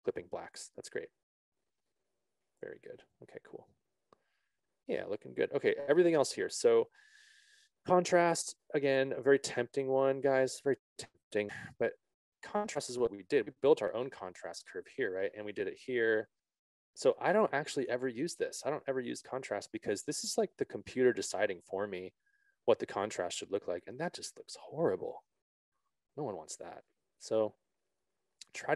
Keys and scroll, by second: 13.0 z, 27.3 ctrl+z.